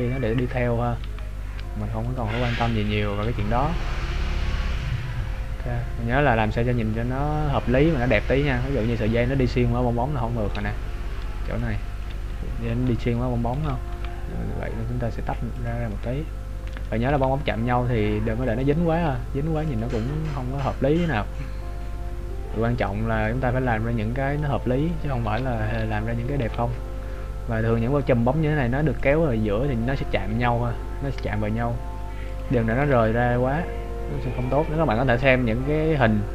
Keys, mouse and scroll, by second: 0.0 g, 2.9 right click, 3.3 g, 5.3 middle click, 8.9 right click, 11.4 d, 11.7 click, 12.1 d, 12.2 d, 13.1 right click, 13.5 d, 14.0 g, 15.9 middle click, 17.1 g, 20.3 middle click, 24.0 middle click, 25.1 right click, 25.7 KP_7, 26.5 g, 29.5 click, 30.2 right click, 30.5 g, 32.9 right click, 33.1 g, 34.8 middle click.